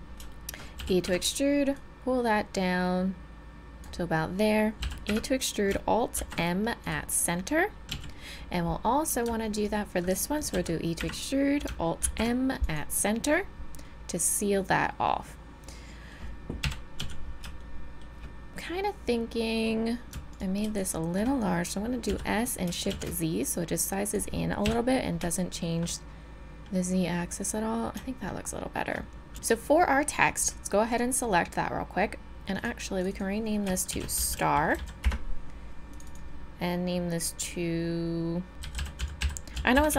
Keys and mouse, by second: 0.8 e, 4.8 e, 6.2 alt+m, 7.9 z, 10.5 e, 11.5 middle click, 12.0 alt+m, 13.7 middle click, 16.6 KP_7, 17.0 z, 21.9 click, 22.1 s, 22.7-24.1 middle drag, 24.6 KP_7, 29.3 a, 30.9-37.9 drag, 37.9 middle click.